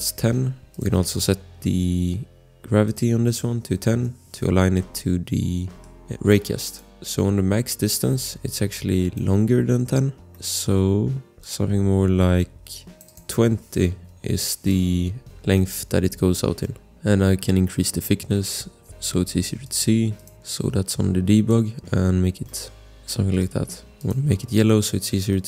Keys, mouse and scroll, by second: 0.7 click, 1.4 scroll, 2.8 click, 3.4-4.3 typing, 4.9 click, 5.8 scroll, 5.8 click, 6.6 click, 10.0 scroll, 10.3 click, 11.4 click, 13.0 click, 13.6-14.5 typing, 15.4 click, 15.5 click, 16.6 click, 16.9 scroll, 19.6 click, 22.1-22.4 scroll, 22.4 click, 23.3 click, 24.0 click, 24.5-25.3 scroll, 25.3 click.